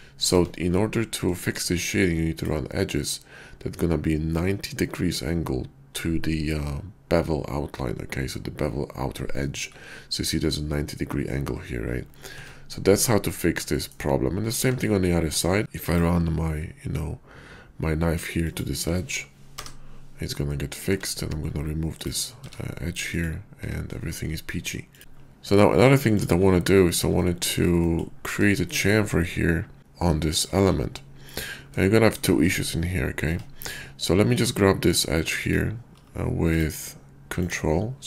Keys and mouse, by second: 0.2 Tab, 12.3 Tab, 13.7 shift+click, 14.6 Tab, 15.6 k, 20.8 Tab, 22.4 x, 23.6 Tab, 25.0 /, 25.6 click, 27.2-27.5 shift+middle drag, 27.9 middle click, 28.5 shift+middle drag, 30.3 click, 31.0 /, 31.9 shift+middle click, 33.2 Tab, 34.3 click, 35.3 click.